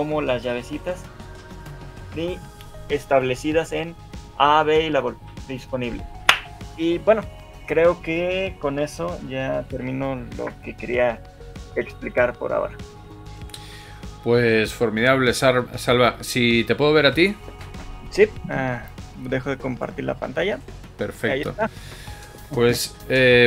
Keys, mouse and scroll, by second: 10.1 shift+middle click, 10.5 alt+a.